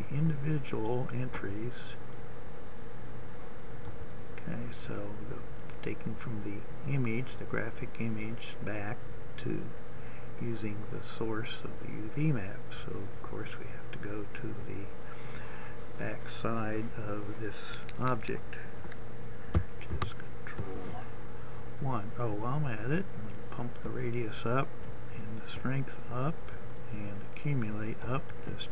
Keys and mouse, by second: 17.3 ctrl+KP_1, 25.0-28.5 drag.